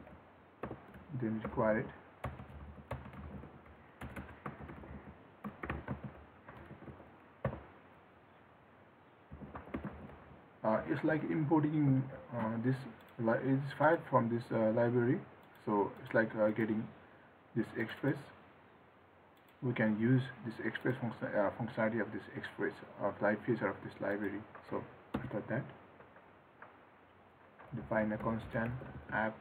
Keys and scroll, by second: 12.0 ctrl+s.